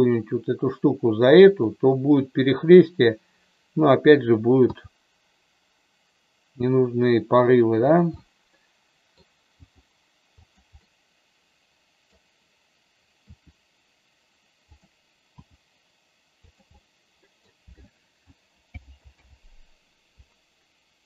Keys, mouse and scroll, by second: 1.4 click, 4.7 g, 8.0-9.1 middle drag, 9.5 g, 10.4 click, 10.7-12.2 middle drag, 13.3 r, 15.3 g, 16.4 click, 16.8 middle click, 18.7 alt+g, 19.0 alt+r.